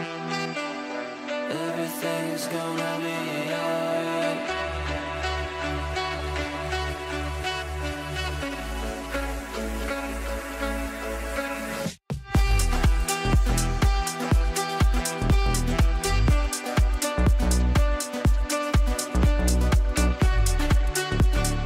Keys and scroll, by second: 10.5 ctrl+r.